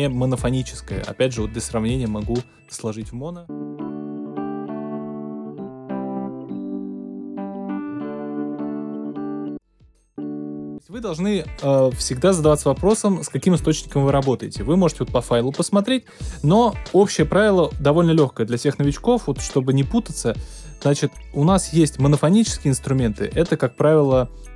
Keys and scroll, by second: 3.4 space, 9.4 space.